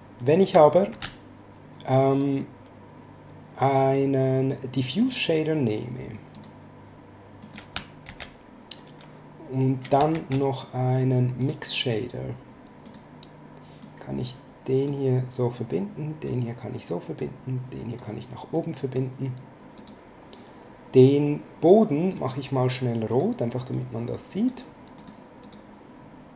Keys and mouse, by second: 0.9 shift+a, 6.3 click, 7.4 click, 8.0 shift+a, 10.1 shift+a, 11.4 click, 12.8 click, 15.5 click, 17.2 click, 18.5 click, 19.7 right click, 22.1 click, 24.9 click, 25.4 right click.